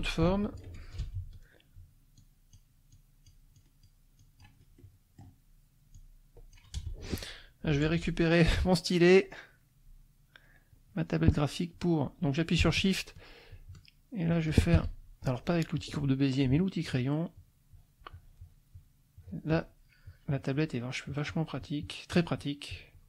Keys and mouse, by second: 1.0 Return, 2.2 click, 2.9 click, 3.5 click, 4.2 click, 4.8 middle click, 5.9 click, 6.7 Return, 10.4 click, 13.5 shift+click, 14.3 shift+click, 14.7 Escape, 15.7 click, 16.8 shift+click, 17.3-19.0 shift+drag, 19.1 shift+click, 20.1 shift+click, 21.0-23.0 shift+drag.